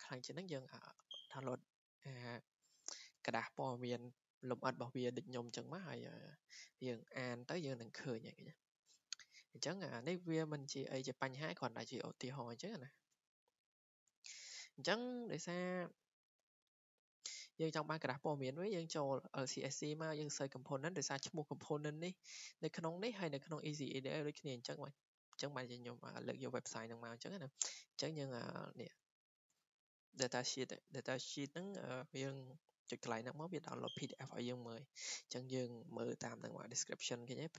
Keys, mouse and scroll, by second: 11.8 click, 14.5 click, 16.4 click, 17.4 click, 23.2 click, 25.6 click, 25.6 click, 30.3 click.